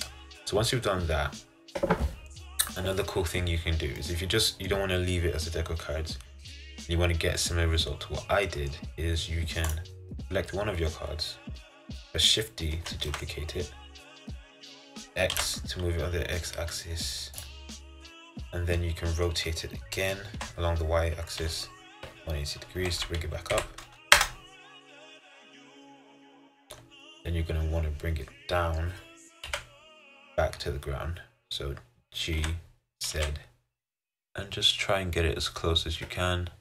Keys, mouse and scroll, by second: 9.8 click, 12.9 shift+d, 17.9-20.5 middle drag, 20.5 r, 25.3-29.6 middle drag, 29.6 KP_1, 32.6 g.